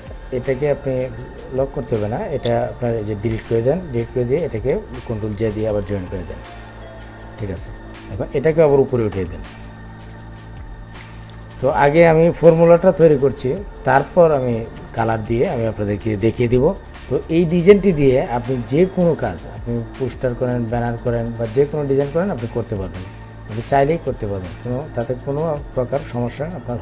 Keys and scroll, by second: 4.7 ctrl+j.